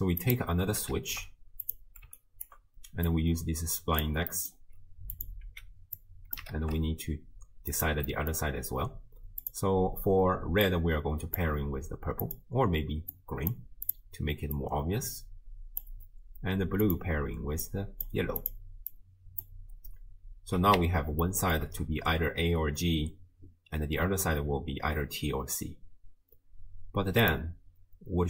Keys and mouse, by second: 0.2 click, 0.9 ctrl+shift+d, 2.2 ctrl+click, 3.1-4.5 drag, 5.2 click, 5.4 x, 6.0 click, 6.5 ctrl+shift+d, 8.1 click, 8.1 middle click, 9.4 click, 12.2 click, 13.9 click, 14.6-15.8 drag, 16.9 click, 18.4 click, 18.9-19.5 drag, 21.4 shift+click, 27.3 click.